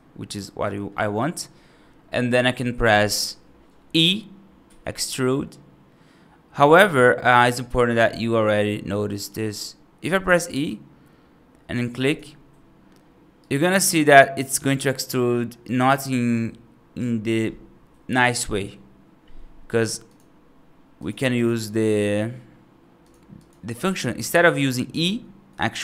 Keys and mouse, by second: 0.2 right click, 0.8 right click, 2.0 right click, 4.5 e, 13.3-14.6 right drag, 14.9-16.9 right drag, 20.8 click, 21.2 click, 22.9 click, 23.2 click, 23.6 click, 24.9 ctrl+z.